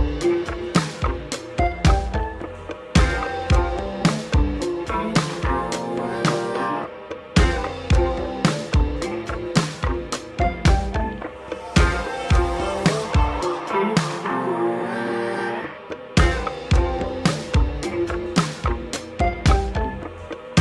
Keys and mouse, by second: 3.9 ctrl+i, 4.3 f, 5.2 ctrl+z, 5.7-9.3 drag, 10.4 alt+m, 11.1 click, 11.6 click, 12.5 click, 12.8 f, 13.3 click, 14.6 ctrl+i, 15.0 f, 16.0 s, 17.2 e, 19.4 ctrl+b.